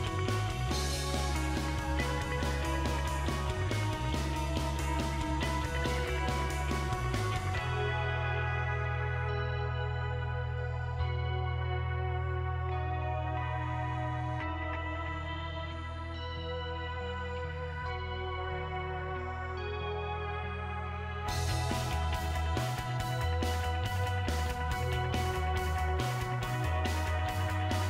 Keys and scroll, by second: 0.0-0.4 typing, 7.2-7.9 typing.